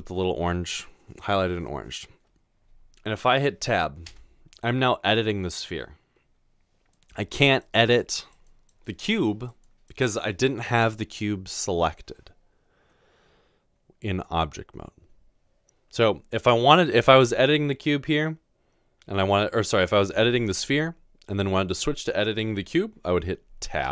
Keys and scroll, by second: 4.1 Tab.